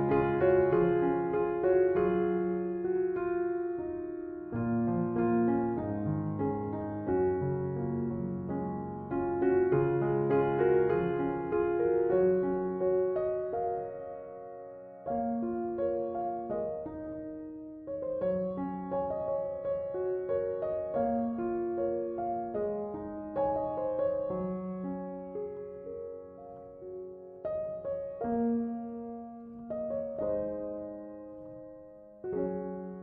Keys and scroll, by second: 16.3-18.5 typing.